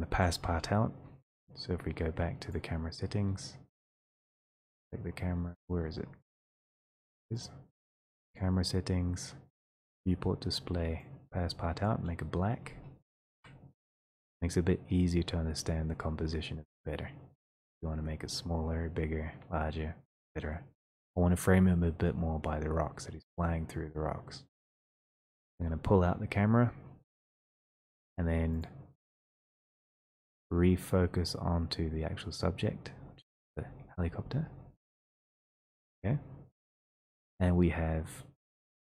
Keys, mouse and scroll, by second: 0.3 middle click, 0.4 ctrl+space, 2.5 click, 4.1 middle click, 4.9 middle click, 4.9 f, 5.0 middle click, 5.0 middle click, 5.7 middle click, 6.0 middle click, 6.2 middle click, 6.3 middle click, 6.6 middle click, 7.5 click, 8.4 click, 10.1 click, 12.6 ctrl+space, 20.7 ctrl+scroll, 25.2 ctrl+middle click, 28.6 ctrl+middle click, 28.6 click.